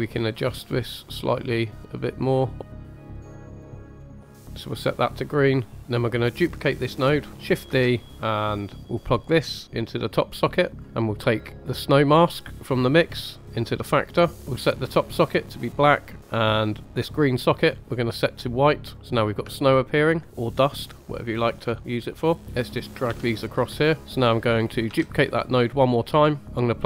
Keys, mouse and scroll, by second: 0.4-2.6 drag, 2.8 click, 2.9 middle click, 3.0 click, 3.1 click, 3.3 click, 3.4 click, 3.6 click, 3.7 ctrl+z, 3.8 middle click, 3.9 scroll up 2, 5.7 middle click, 5.7-6.1 scroll down 2, 7.1 click, 7.6 shift+d, 8.1 click, 9.4-10.8 drag, 10.8 middle click, 11.5 scroll down 1, 12.6-14.4 drag, 15.1 click, 19.0 scroll up 2, 19.5-20.1 shift+middle drag, 20.2-20.9 middle drag, 21.1 scroll down 1, 21.7 shift+middle drag, 22.2 middle click, 22.4 drag, 23.0 g, 24.8 shift+d, 26.4 middle click.